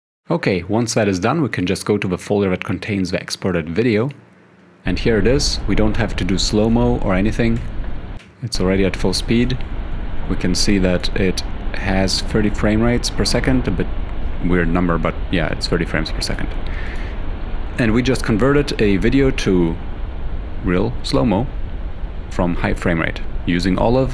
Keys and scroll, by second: 7.7 -, 8.3 =, 9.5 ctrl+i, 18.4 f.